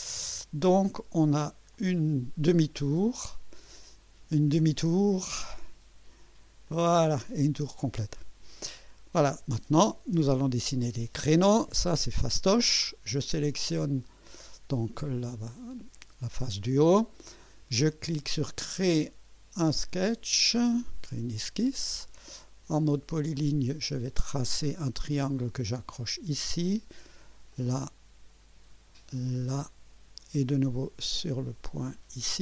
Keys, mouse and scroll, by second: 1.7 click, 2.8 scroll down 1, 3.3-3.9 right drag, 5.4 click, 6.7-7.3 right drag, 8.0 click, 8.8-10.8 drag, 11.3-11.9 drag, 14.0 click, 18.6 click, 19.8-20.4 right drag, 20.6 scroll up 1, 21.3 scroll up 1, 21.7 right click, 23.4 click, 25.9 click, 27.5 click, 29.5 click, 31.8 click.